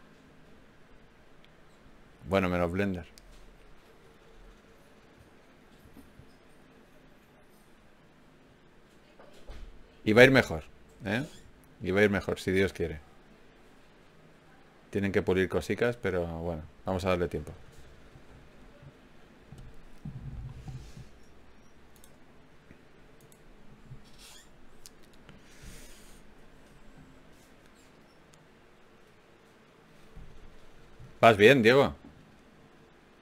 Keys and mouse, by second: 0.7 g, 2.1 g, 3.4 right click, 3.8 g, 5.2 right click, 6.0 g, 6.2 click, 9.9 ctrl+Tab, 12.0 f, 12.8 f, 13.2 f, 14.6 f, 15.2 f, 15.4 f, 22.6 ctrl+r, 24.1-25.9 drag, 25.1 ctrl+Tab, 27.2 ctrl+Tab, 28.0-29.1 drag, 29.6 g, 32.4 ctrl+Tab.